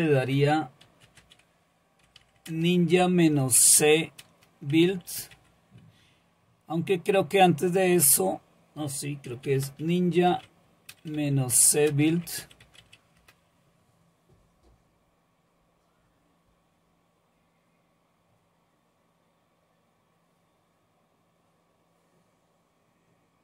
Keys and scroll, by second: 0.6-7.9 typing, 9.0-13.3 typing, 14.9-15.7 typing.